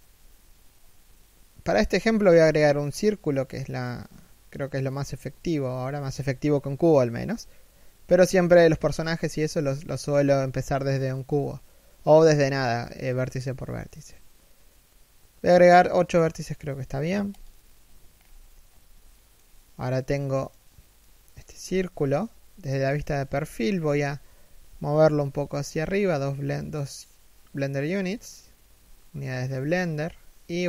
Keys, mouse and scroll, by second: 17.7 scroll up 1, 18.7 shift+middle click, 19.1 middle click, 21.2 KP_1, 22.7-23.1 scroll down 1, 23.1 shift+middle click, 24.0 g, 27.6-28.3 scroll up 1, 28.6 shift+middle click, 30.3 e.